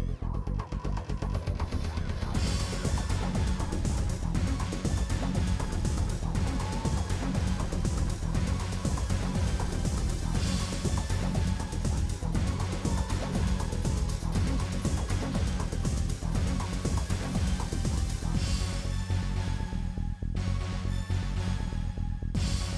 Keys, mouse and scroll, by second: 0.4 middle click, 1.3 middle click, 2.0 1, 2.2 shift+click, 2.7 right click, 3.4 click, 4.0 right click, 4.7 click, 5.3 shift+middle click, 6.0 click, 6.2 Delete, 6.6 click, 6.7 Delete, 7.0 click, 8.3 ctrl+z, 8.6 right click, 9.1 Delete, 9.5 click, 9.9 Delete, 10.1 click, 10.2 Delete, 10.5 click, 10.6 Delete, 11.1 click, 11.9 f, 12.2 shift+click, 12.6 f.